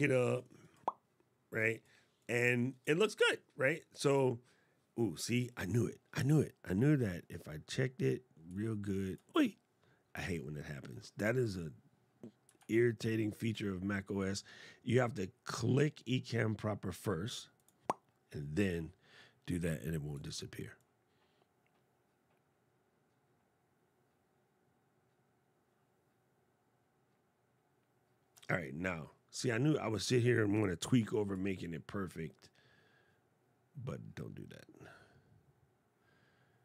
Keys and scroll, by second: 12.3 super+Tab.